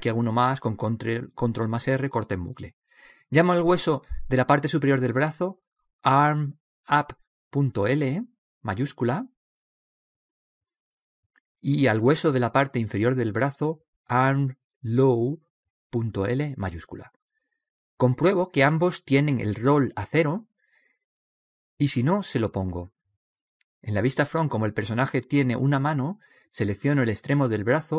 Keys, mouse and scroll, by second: 4.4-6.3 right drag, 6.3 click, 8.8 BackSpace, 12.8-14.7 right drag, 13.6-14.7 drag, 20.2-23.1 right drag, 23.3 middle click, 24.9-26.7 right drag, 26.0 KP_1.